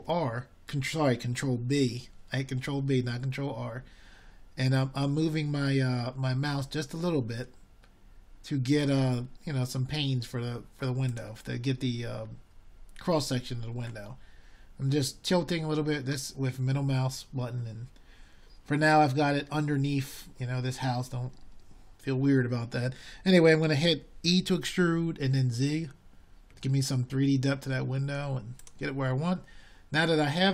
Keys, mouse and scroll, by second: 11.8 ctrl+b, 26.4-27.7 middle drag.